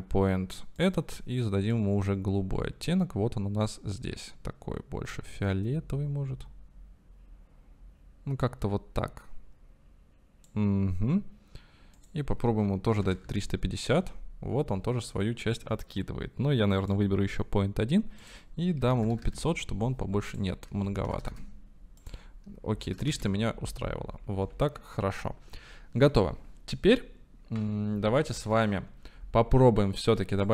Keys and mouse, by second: 0.9 click, 12.0-15.1 drag, 16.9-17.4 drag, 18.4 click, 19.2 KP_0, 21.2 KP_0, 23.0 KP_0, 25.5 ctrl+s.